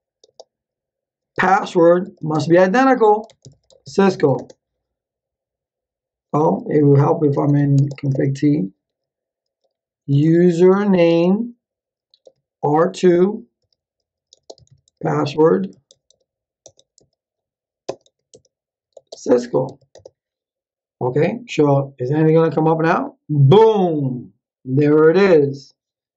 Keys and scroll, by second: 0.2-4.3 typing, 7.0-8.4 typing, 9.8-11.4 typing, 13.3-20.1 typing.